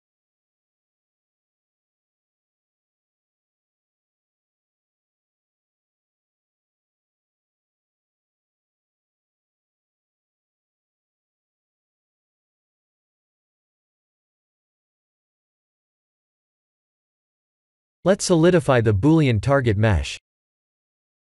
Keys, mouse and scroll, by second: 5.4 click, 6.1 click, 6.5 click, 6.9 click, 8.5-9.7 alt+middle drag, 10.6 click, 11.3 alt+middle click, 11.8 shift+z, 12.2-13.2 alt+middle drag, 15.6 click, 16.0 ctrl+a, 17.0 click, 18.8-21.3 drag.